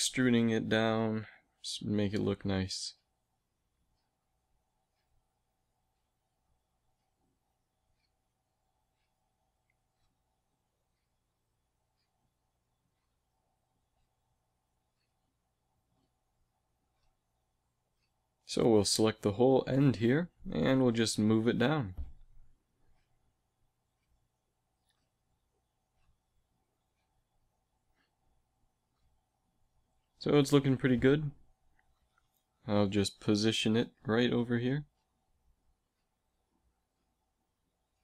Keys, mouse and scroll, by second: 0.4 s, 4.0 e, 5.8 s, 9.2 a, 11.2 g, 12.0 g, 14.8 g, 16.7 a, 18.8 z, 19.2 b, 20.0 z, 20.3 g, 24.7 a, 28.9 Tab, 29.5 a, 30.2 ctrl+s, 32.0 KP_3, 34.1 g.